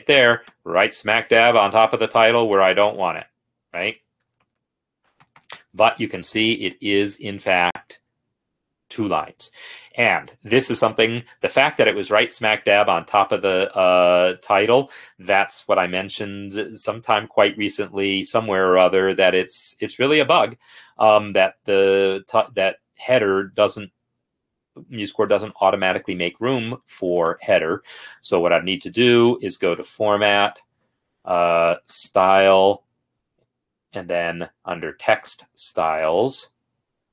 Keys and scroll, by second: 4.5 ctrl+Down, 4.6 ctrl+Down, 4.8 ctrl+Down, 5.0 ctrl+Down, 12.1 ctrl+r.